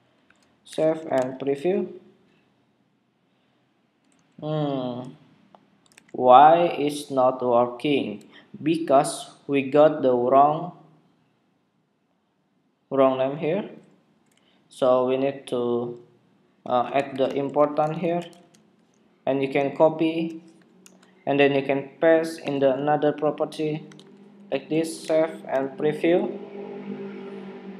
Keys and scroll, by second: 0.3 super+s, 1.1 super+Tab, 1.5 super+r, 4.2 super+r, 5.8 super+Tab, 20.7 super+c, 22.7 super+v, 24.1 super+v, 24.9 super+Tab, 25.9 super+r.